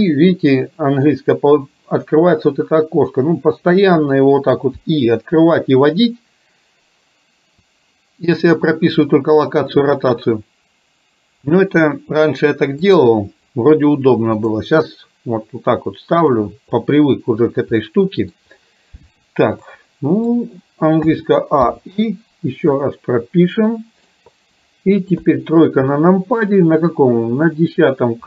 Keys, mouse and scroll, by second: 4.7 i, 13.1-14.5 drag, 16.5 click, 16.5 right click, 17.9 middle click, 19.7 middle click, 21.2 a, 21.7 i, 22.9-24.1 middle drag, 25.2 KP_3, 27.6 click.